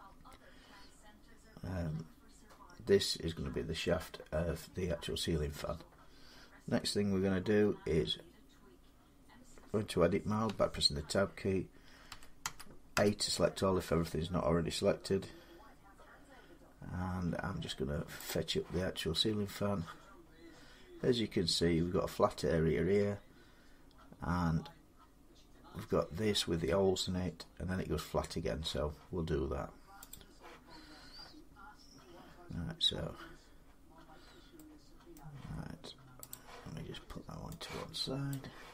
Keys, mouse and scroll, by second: 4.3 scroll down 1, 4.4 middle click, 4.6 middle click, 10.3 Tab, 11.9-12.8 typing, 18.1-23.2 drag, 30.0-35.0 drag, 35.0-36.2 middle drag, 36.2 click, 38.1 click.